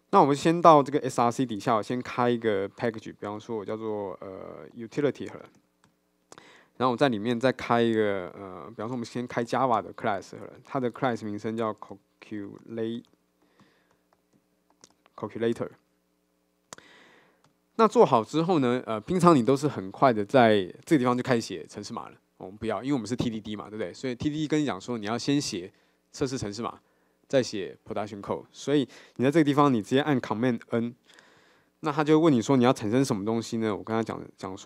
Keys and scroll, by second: 1.6 super+n, 7.0 super+n, 30.8 super+n.